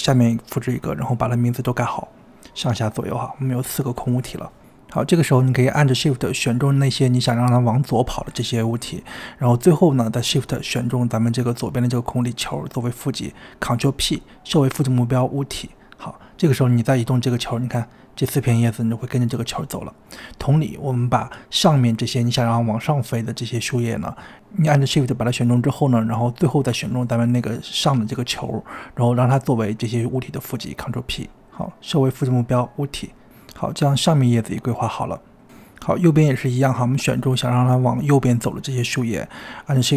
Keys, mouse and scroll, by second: 0.0 click, 0.1 n, 0.4-1.1 scroll up 2, 1.1 click, 1.1 click, 2.0 scroll down 2, 2.2-2.7 scroll up 1, 2.7 click, 3.5 click, 4.6 shift+drag, 5.4 shift+click, 6.8 shift+click, 8.2 shift+click, 12.5 shift+click, 13.4 ctrl+p, 15.7 click, 16.5 g, 19.1 click, 19.4-20.3 middle drag, 20.3 shift+click, 20.7 shift+click, 21.2 shift+click, 21.5 shift+click, 22.1 KP_1, 22.4-22.8 scroll up 4, 22.8-23.5 scroll down 2, 28.2 shift+click, 28.7-29.4 scroll down 5, 29.4-30.3 scroll up 4, 30.3 shift+click, 31.1 ctrl+shift+p, 32.0 ctrl+p, 34.6 click, 35.1 click, 35.9 click, 36.3 scroll down 4, 36.3 middle drag, 36.5-37.6 scroll up 3, 37.6-38.6 scroll up 1, 38.6 click, 39.5 shift+click.